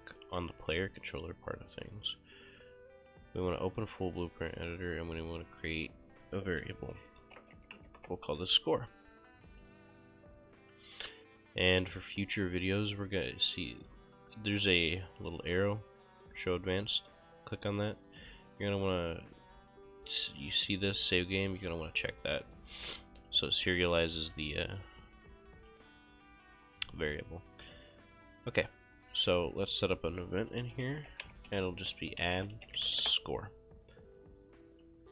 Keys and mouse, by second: 0.2 click, 3.1 click, 4.2 right click, 5.5 click, 7.4-8.2 typing, 9.6 click, 10.7 click, 11.9 click, 14.6 click, 16.8 click, 21.6 click, 23.2 click, 24.6 click, 29.0 right click, 30.2-33.3 typing, 34.2 click.